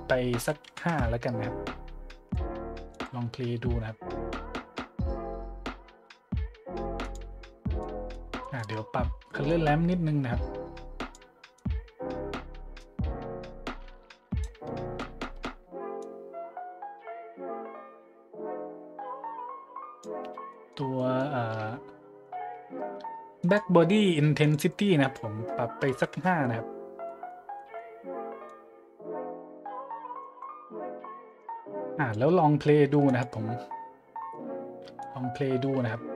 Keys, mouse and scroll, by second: 0.6 KP_5, 0.9 KP_Enter, 2.1-2.4 drag, 2.9 click, 4.2 middle click, 7.0-7.4 drag, 7.8 middle click, 8.4-9.3 middle drag, 9.4-11.1 drag, 11.6-14.4 drag, 14.6 middle click, 14.9 middle click, 15.4 middle click, 16.0-20.0 drag, 20.2 middle click, 20.5 middle click, 21.0-21.3 middle drag, 23.4 click, 24.4-24.7 drag, 25.0 click, 25.9 KP_5, 26.1 KP_Enter, 27.0-27.4 middle drag, 27.5 middle click, 28.4-29.1 drag, 30.2-30.5 drag, 31.3-32.1 drag, 33.1 click, 35.0-35.3 middle drag.